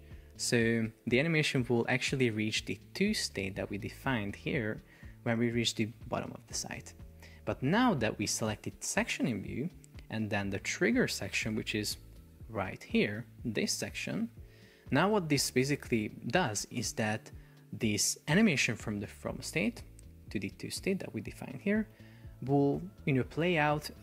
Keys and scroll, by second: 12.3 shift+super+4, 14.6 Escape.